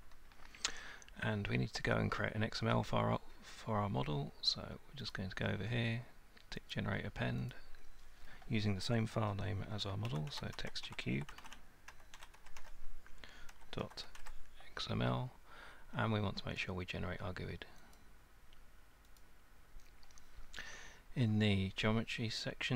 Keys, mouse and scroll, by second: 5.1 click, 6.7 click, 7.5 click, 10.1-14.2 typing, 18.0 click, 19.2 click.